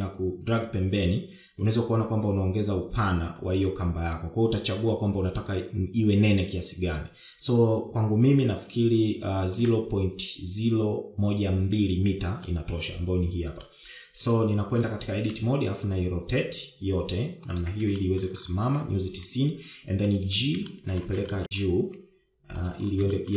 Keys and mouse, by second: 13.7-14.9 middle drag, 15.5 KP_1, 16.3 Tab, 17.0 r, 19.3 shift+middle click, 22.0 shift+middle click, 22.6 shift+middle click, 23.2 g.